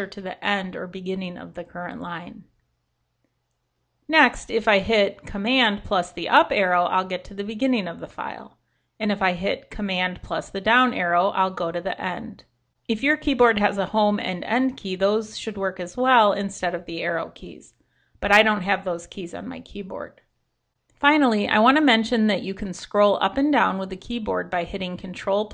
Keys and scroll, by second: 0.5 super+Left, 0.9 super+Right, 5.5 super+Up, 10.1 super+Down.